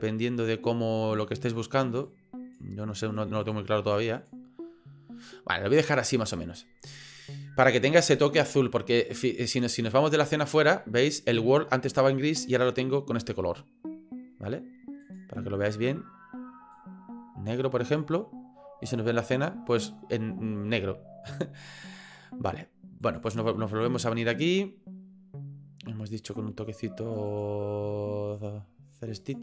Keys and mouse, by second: 15.0 click, 22.1-23.3 drag, 23.4 middle click, 26.5 middle click, 27.6 middle click.